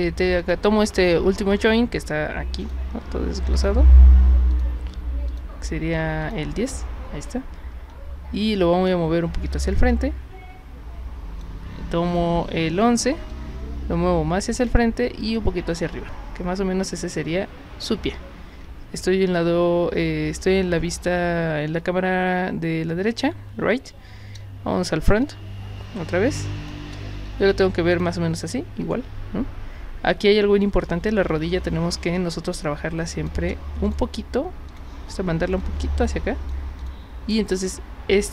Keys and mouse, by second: 0.4 click, 2.6 click, 3.5 click, 4.5 click, 5.3 click, 6.2 click, 8.4 w, 9.9-11.4 drag, 12.1 click, 13.3-14.7 drag, 15.4-17.1 drag, 24.5 space, 25.2-26.7 drag, 27.9 click, 32.1-33.3 drag, 33.9 click, 34.7 click, 35.6 click, 36.8 click, 38.1 click.